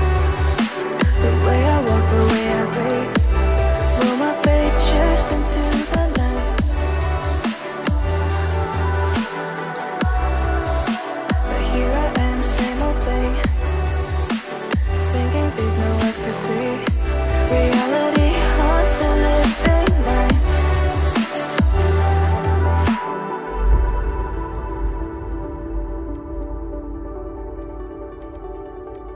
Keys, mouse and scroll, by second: 8.0-9.9 ctrl+scroll up 2, 10.0 ctrl+click, 14.6-15.5 ctrl+scroll down 1, 16.4 double click, 18.0-19.5 ctrl+scroll down 1, 20.2 right click, 21.0 right click, 23.6 scroll up 1, 24.0-24.5 ctrl+scroll down 1, 25.4 double click, 27.3 click.